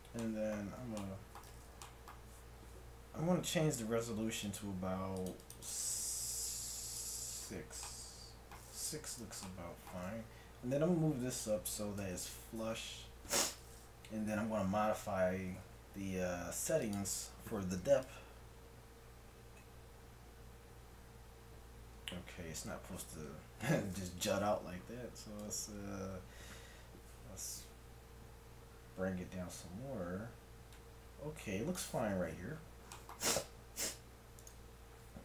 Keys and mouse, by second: 0.7 z, 3.9 middle click, 4.5-8.5 drag, 8.5-9.6 middle drag, 10.1 g, 12.2 KP_1, 15.4 g, 18.1-19.7 drag, 21.3-23.3 middle drag, 25.4-26.7 drag, 27.0 click, 27.3-30.7 middle drag, 34.4-35.2 right drag.